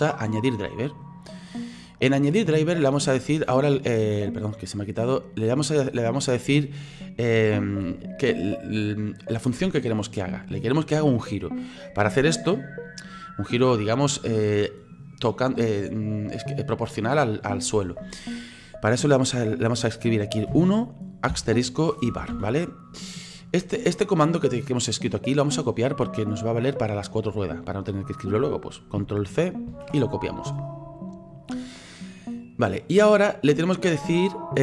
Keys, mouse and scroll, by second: 3.3-34.6 right drag.